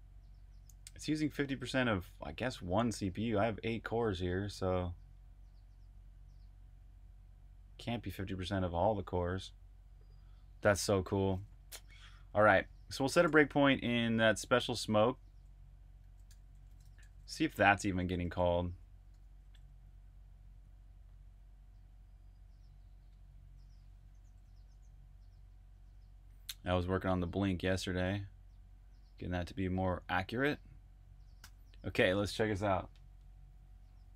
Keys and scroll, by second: 11.9 Escape, 13.1 super+j, 14.7-18.2 typing, 19.1 super+\, 19.4-21.6 typing, 23.1 Return.